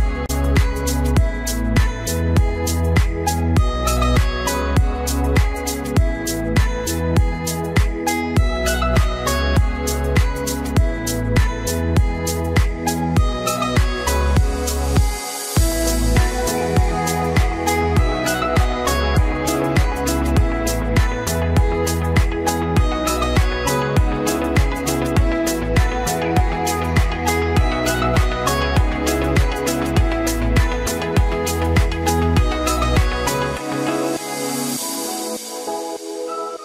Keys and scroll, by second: 11.4 ctrl+t.